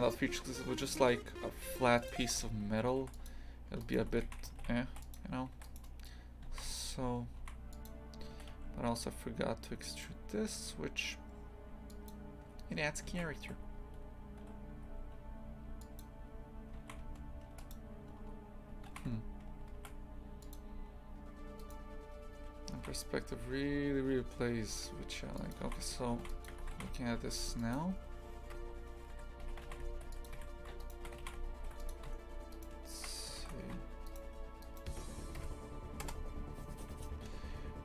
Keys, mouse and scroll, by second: 2.1 click, 2.2 shift+f, 3.7 Tab, 3.8 right click, 4.0 Tab, 4.3 shift+f, 5.7 right click, 6.5 shift+f, 8.3 e, 13.1 shift+f, 16.8 shift+f, 18.1 Tab, 18.9 shift+f, 21.6 right click, 22.7 shift+f, 25.7 shift+f, 26.5 Tab, 26.8 shift+f, 28.5 KP_Divide, 29.5 a, 29.7 shift+f, 30.8 alt+shift+right click, 31.2 shift+f, 32.5 alt+shift+right click, 33.4 ctrl+z, 34.1 alt+shift+right click, 34.6 alt+shift+right click, 35.4 KP_Divide, 36.0 KP_0.